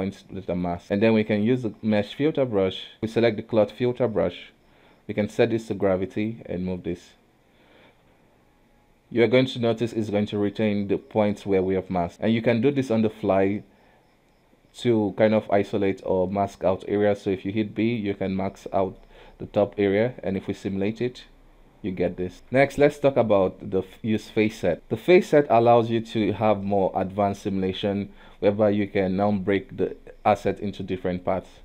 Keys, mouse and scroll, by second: 0.1 middle click, 0.8 space, 2.4 click, 3.0 space, 5.1-6.3 drag, 9.7-10.0 scroll down 1, 10.0-12.8 middle drag, 12.8 KP_1, 17.4 b, 19.0-20.4 middle drag, 20.4 click, 22.3-28.2 middle drag, 28.4-31.6 middle drag.